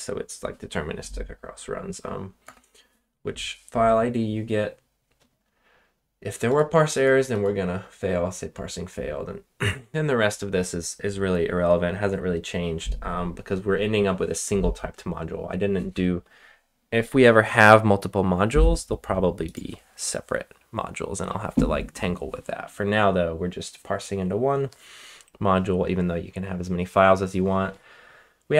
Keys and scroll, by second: 2.4 BackSpace.